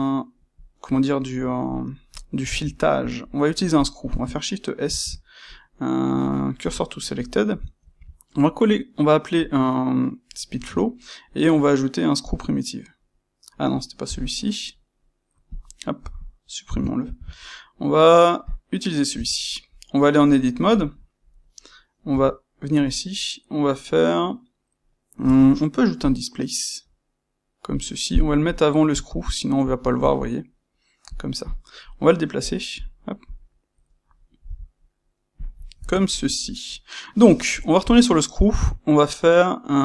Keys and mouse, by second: 3.7 click, 4.8 shift+s, 7.2-15.5 middle drag, 7.8 shift+c, 15.5 click, 15.9 >, 17.0 shift+c, 19.0 Tab, 25.2 space, 26.0 space, 31.4 click, 32.4 click, 32.7 click, 33.2 click, 34.1-35.4 middle drag, 34.4 c, 35.4 click, 35.5-37.2 ctrl+middle drag, 37.2 space, 37.9 space.